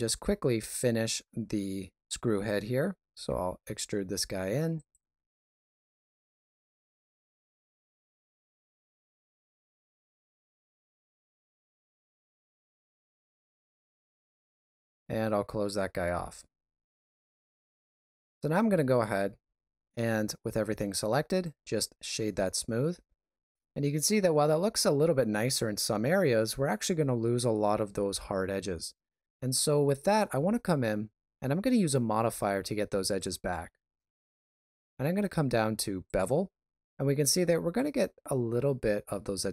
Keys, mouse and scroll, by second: 0.1 shift+middle click, 0.6 ctrl+middle click, 3.1 e, 5.7 e, 6.9 g, 7.9 KP_1, 8.2 alt+z, 8.3 scroll up 4, 8.5 shift+middle click, 8.9 ctrl+r, 9.6 middle click, 9.9 scroll down 3, 10.2 alt+z, 10.5 alt+s, 11.4 ctrl+b, 13.0 middle click, 13.6 alt+right click, 14.4 f, 14.8 middle click, 15.4 alt+a, 15.7-16.5 scroll down 2, 16.5 shift+middle click, 17.2 Tab, 17.8 right click, 19.3 w, 33.0 click.